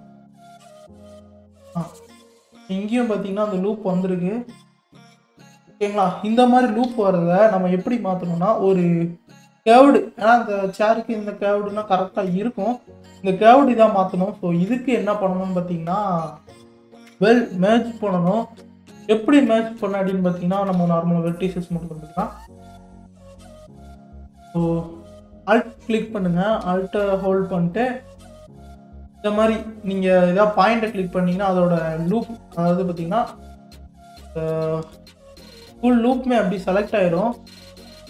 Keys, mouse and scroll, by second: 0.0 alt+click, 0.9 alt+click, 1.8 middle click, 2.4-3.4 scroll down 5, 3.4-6.5 middle drag, 6.9 KP_3, 7.4-10.8 scroll up 11, 14.2-15.2 scroll down 1, 15.2 click, 16.0 scroll up 1, 16.5-18.6 scroll up 3, 18.6 Tab, 19.2 Tab, 20.8 1, 22.0-22.6 scroll up 1, 22.6-25.2 scroll up 1, 25.2 scroll down 4, 27.8 alt+click, 29.9 alt+click, 30.6 alt+click, 31.8 middle click, 32.6-33.2 scroll down 2, 33.2-38.0 middle drag.